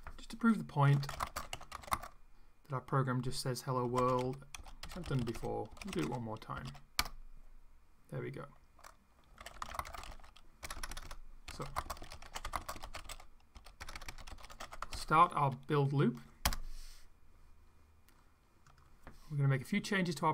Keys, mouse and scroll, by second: 0.5-2.3 typing, 3.6-7.1 typing, 9.0-15.4 typing, 16.4 Return, 18.6 click.